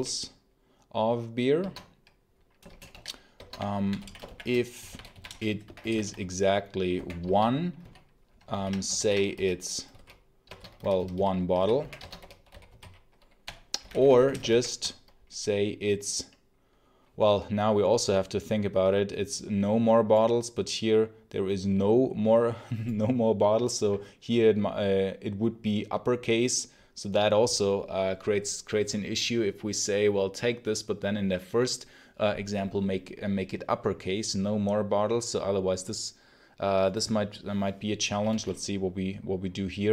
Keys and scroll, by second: 0.0-0.2 typing, 1.5 Escape, 2.6-7.7 typing, 7.1 Escape, 8.4 ctrl+d, 8.9 ctrl+j, 9.2-14.9 typing, 10.3 Escape.